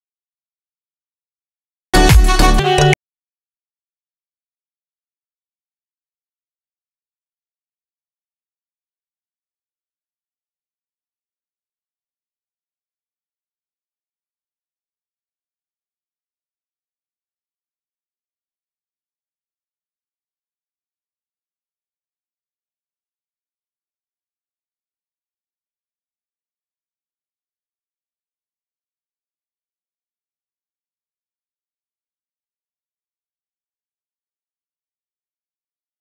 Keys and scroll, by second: 8.5 alt+space, 25.4 a, 27.6 v.